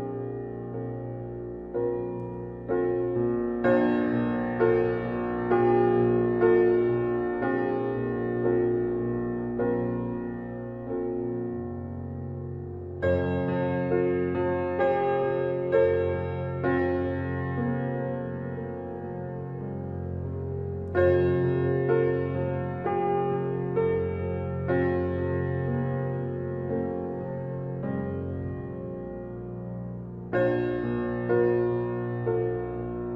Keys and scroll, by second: 1.8 typing, 7.5 typing, 12.4 typing, 14.0 typing.